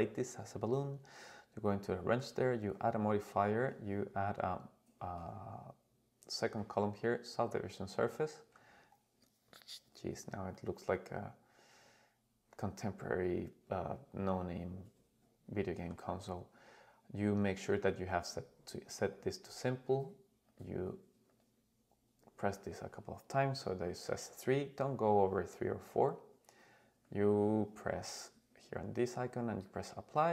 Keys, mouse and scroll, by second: 2.3-7.5 drag, 9.2-10.5 scroll up 2, 10.5-16.0 middle drag, 17.9 click, 20.5 click, 21.3 click, 27.0-29.8 drag.